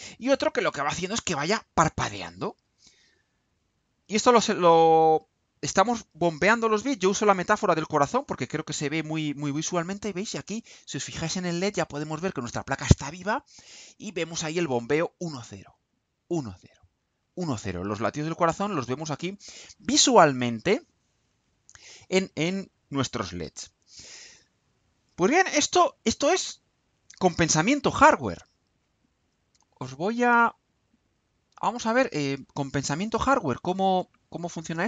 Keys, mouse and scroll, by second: 30.7 click, 31.9 click, 33.7 click.